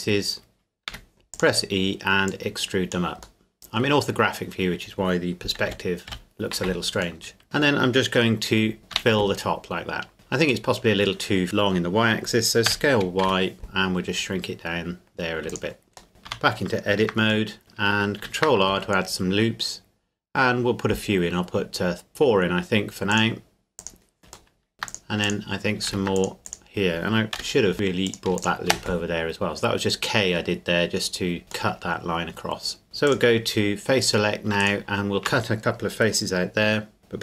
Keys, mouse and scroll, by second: 0.9 e, 1.3-3.4 drag, 3.4-5.4 middle drag, 5.7 KP_5, 7.2 middle click, 8.9 f, 10.1 Tab, 10.7 middle click, 12.7 s, 13.2 y, 15.5-16.1 drag, 16.1 middle click, 16.3 Tab, 17.5 middle click, 18.2 ctrl+r, 18.8-19.1 scroll up 1, 22.1-23.1 scroll up 1, 23.1 click, 24.5 middle click, 24.7 ctrl+r, 25.2 click, 25.9 ctrl+r, 26.2 click, 27.4 k, 28.1 click, 28.7 space, 31.7 middle click, 33.1 click, 34.0 right click, 34.6 shift+right click.